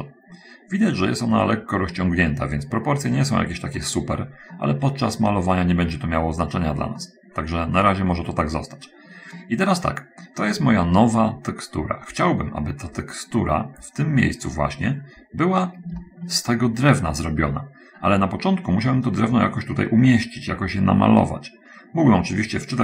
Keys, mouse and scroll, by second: 1.1 middle click, 2.3 middle click, 3.6-4.8 middle drag, 4.9-6.9 middle drag, 7.0-8.0 middle drag, 8.2-9.6 middle drag, 9.8-10.8 middle drag, 10.9-12.4 middle drag, 14.2 scroll up 1, 15.4-15.9 scroll down 2, 16.1 shift+middle click.